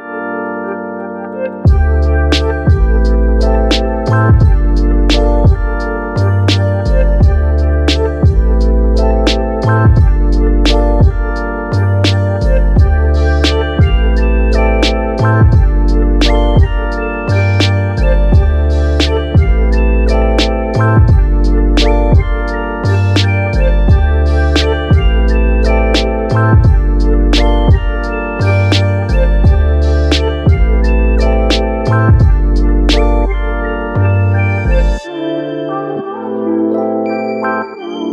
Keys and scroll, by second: 15.9 ctrl+z, 16.9 ctrl+z, 17.3 ctrl+2, 37.3 ctrl+g.